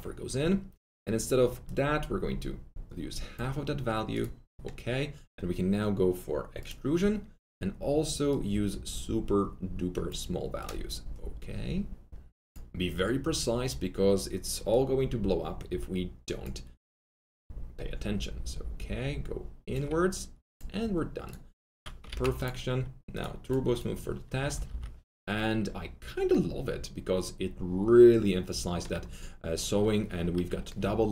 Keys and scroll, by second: 22.0 ctrl+z, 24.3 F3, 24.5 F3, 24.6 F4.